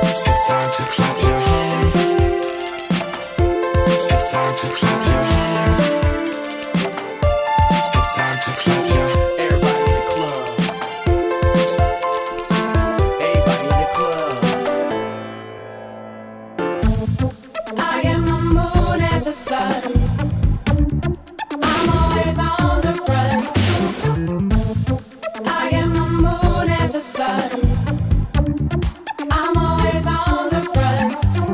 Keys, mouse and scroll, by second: 1.3 right click, 1.4-4.0 drag, 6.1 click, 6.6 click, 9.8-13.0 drag, 13.3 click, 15.5-18.0 drag, 17.8-20.0 typing, 20.4 Return, 21.8-23.1 typing, 22.1 click, 22.8-24.0 drag, 24.2-26.4 drag, 26.5 click, 27.2-31.5 drag.